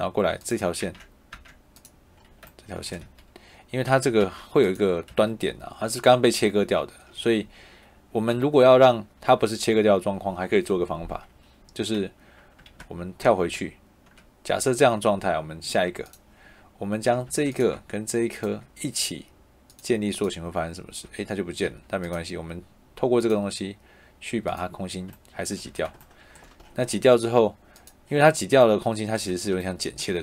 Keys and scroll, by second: 1.1 Tab, 2.9 Escape, 3.7 Tab, 5.0 Escape, 12.7 ctrl+z, 17.2 Tab, 20.9 Escape, 25.5 Escape.